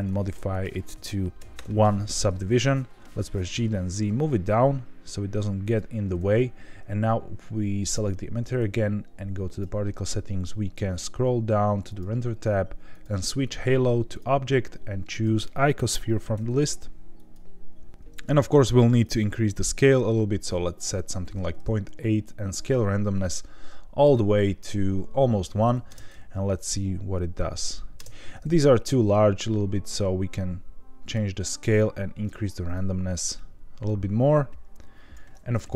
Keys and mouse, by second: 0.5-2.0 drag, 3.2 g, 3.3 z, 5.6 click, 11.9 click, 12.9-14.1 drag, 15.1-17.3 drag, 19.0-20.7 drag, 22.3-24.0 drag, 25.8 space, 27.9 space, 29.4-31.2 drag, 31.4 click, 32.7-35.1 drag.